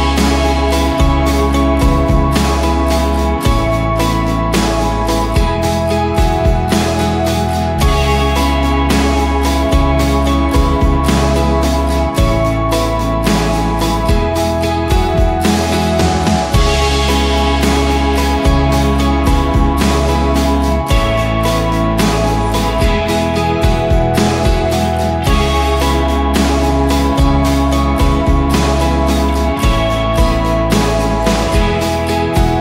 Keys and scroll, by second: 0.0-0.6 typing, 10.4-11.2 typing, 14.5-14.8 typing, 16.1-17.1 typing, 18.5 2, 19.1 Return, 24.2 shift+Up, 24.6 shift+Up, 29.6-31.2 typing, 31.9 Tab, 32.3-32.6 typing.